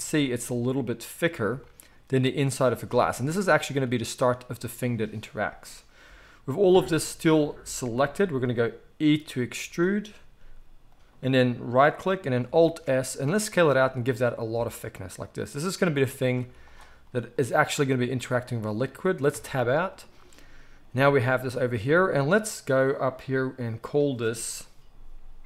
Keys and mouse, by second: 8.1 g, 10.2 e, 12.7 alt+s, 16.4 z, 19.3 Tab, 20.7 g, 23.7 click, 23.8 middle click, 23.8-25.4 drag.